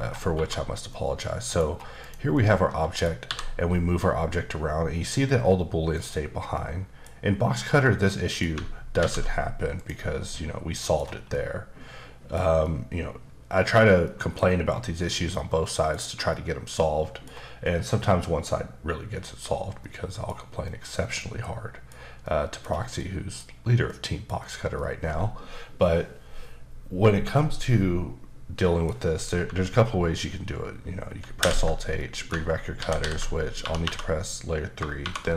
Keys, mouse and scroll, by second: 0.9 middle click, 1.6 scroll down 2, 2.0 click, 2.3 middle click, 3.2 g, 6.0 right click, 6.5 middle click, 8.1 middle click, 9.0 alt+v, 9.7 click, 10.3 middle click, 11.0 scroll down 1, 11.3 middle click, 12.6 middle click, 14.0 middle click, 14.6-15.3 scroll up 2, 15.3 middle click, 16.3 middle click, 17.6 middle click, 19.8 middle click, 20.6 middle click, 22.7 scroll down 1, 23.0 middle click, 23.9 middle click, 24.7 middle click, 31.4 alt+h, 32.0 middle click, 32.8 alt+h, 33.0 alt+h, 33.6 typing.